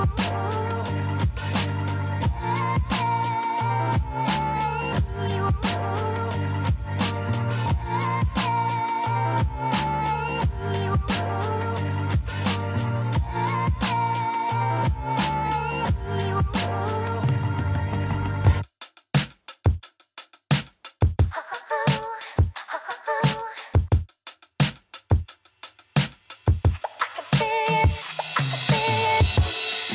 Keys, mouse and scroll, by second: 0.7 shift+click, 1.5-2.4 scroll up 5, 2.9-5.8 middle drag, 5.8 click, 7.8-8.7 scroll down 1, 8.7-11.8 middle drag, 11.8 r, 16.1 ctrl+z, 16.5-19.1 middle drag, 19.1 r, 25.0 click, 25.4 scroll down 2, 25.7-28.8 middle drag.